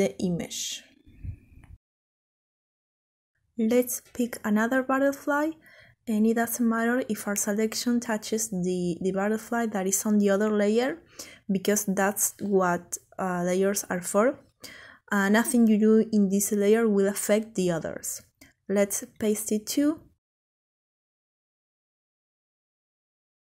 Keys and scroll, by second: 17.2 ctrl+x, 18.2 ctrl+v, 21.7 ctrl+t.